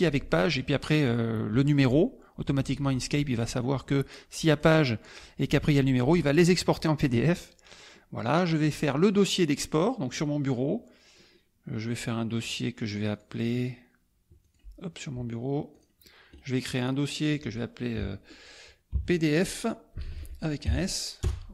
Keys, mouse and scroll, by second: 4.2-5.3 drag, 8.6 click, 12.4 right click, 13.2 click, 14.4 click, 15.8 click, 16.3 right click, 17.0 click, 18.9-20.6 typing, 21.4 Return.